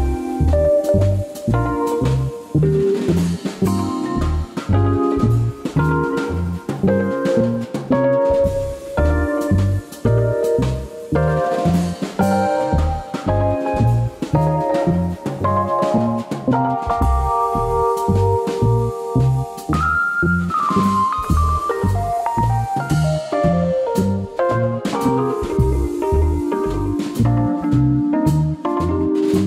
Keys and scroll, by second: 6.7 super+x, 8.1 super+x, 8.9 super+x, 9.0 super+d, 10.1 super+x, 10.4 super+x, 11.5 super+x, 14.3 super+x, 15.9 super+x, 16.3 super+d, 17.0 super+x, 19.3 super+x, 21.0 super+x, 21.6 super+d, 22.6 super+x, 23.4 super+x, 24.5 super+z, 24.5 super+d, 24.9 super+x, 26.2 super+x, 26.5 super+d, 26.8 super+x, 27.1 super+x, 27.6 super+d, 28.5 super+x, 29.3 super+x.